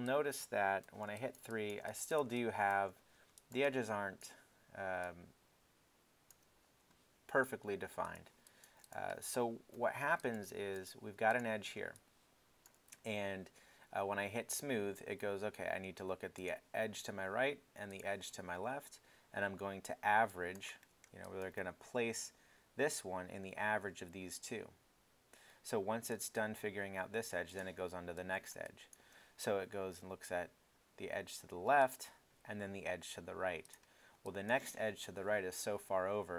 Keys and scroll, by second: 0.8 alt+3, 9.7 alt+i, 10.1 alt+i.